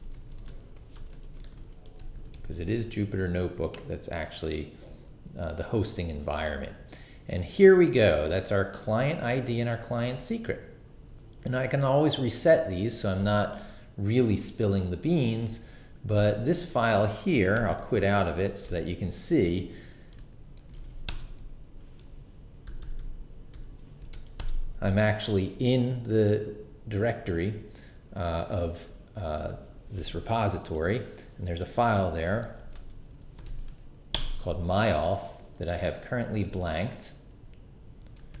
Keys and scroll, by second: 0.0-2.8 typing, 17.3-18.3 typing, 18.6 Return, 20.3-21.3 typing, 22.1 super+Return, 22.7 super+=, 24.0 super+l, 24.1 s, 24.4 Return, 32.6-33.9 typing, 34.1 Return.